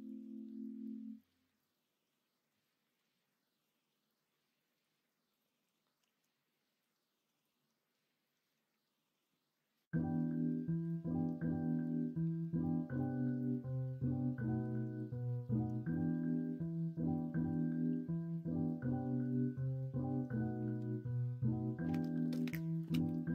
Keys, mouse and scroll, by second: 0.8 2, 1.5 middle click, 3.8-5.0 drag, 5.0 right click, 6.0 e, 7.1 ctrl+z, 10.1-11.5 drag, 11.5-13.1 middle drag, 16.2 ctrl+r, 20.7 ctrl+b.